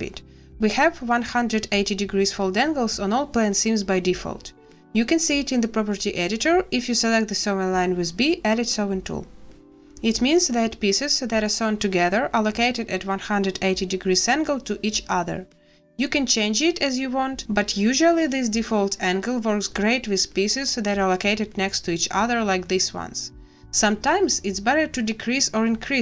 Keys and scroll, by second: 3.0 b, 8.5 b.